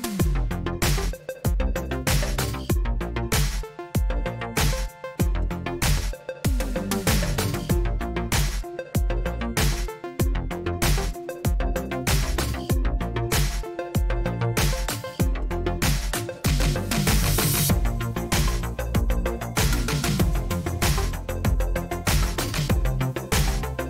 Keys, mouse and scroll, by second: 0.0-0.8 typing, 0.9 Return, 2.7-8.0 drag, 7.8-9.1 typing, 11.9-16.2 typing, 17.5-18.2 typing, 19.2 Return, 23.7 Return.